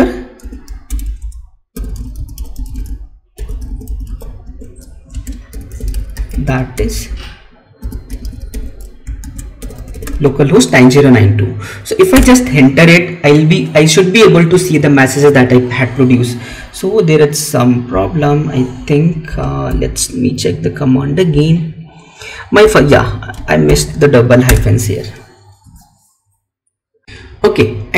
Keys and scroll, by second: 5.1 space, 19.6 Up, 21.2 Left.